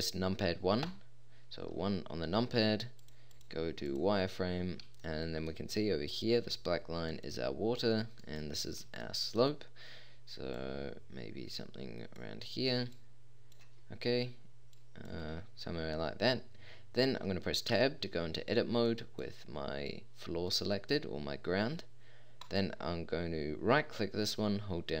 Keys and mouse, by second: 0.9 KP_1, 3.0-4.1 drag, 4.5-5.0 middle drag, 7.1-9.6 drag, 17.7 Tab, 22.4-25.0 middle drag.